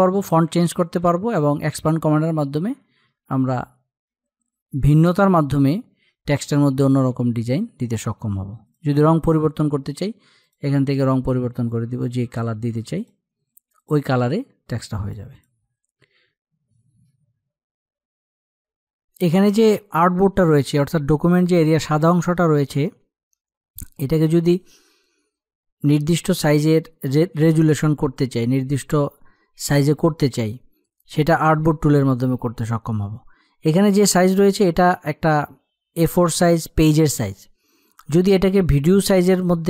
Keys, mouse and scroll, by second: 5.7-14.7 drag.